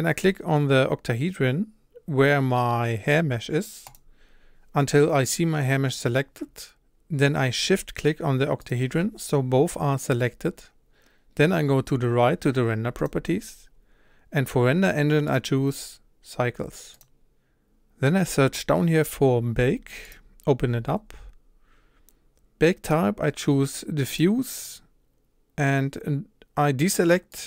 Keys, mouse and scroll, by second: 8.7 shift+click, 17.0-27.3 drag.